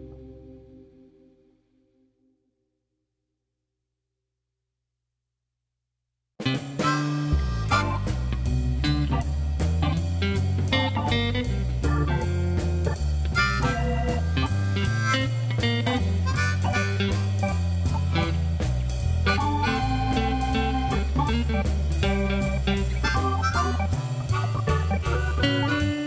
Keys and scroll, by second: 0.0 g, 0.3 z, 2.8 g, 3.0 z, 4.9 ., 6.6 Tab, 8.6 g, 8.9 z, 12.6 i, 14.0 e, 16.2 i, 18.7 2, 20.7 ctrl+b, 24.9 3.